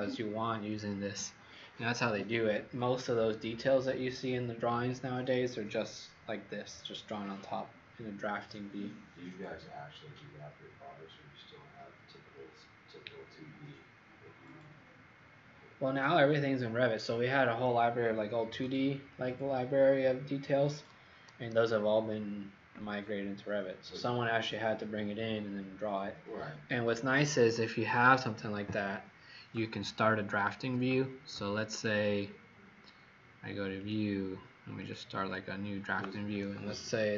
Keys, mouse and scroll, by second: 30.5 Escape, 31.6 click.